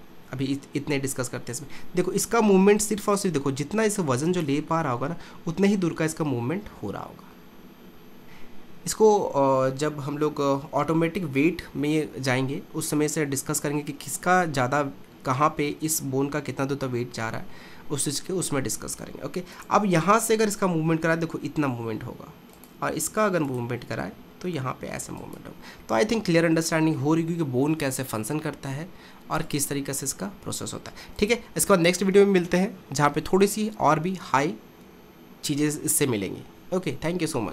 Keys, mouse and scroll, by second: 1.3 r, 4.7 middle click, 5.5 r, 14.6-15.1 scroll up 1, 15.1-18.1 middle drag, 18.6-19.6 middle drag, 19.6 click, 20.7 r, 23.5 click, 24.1 r, 25.9-29.5 middle drag, 29.5 click, 30.3 r.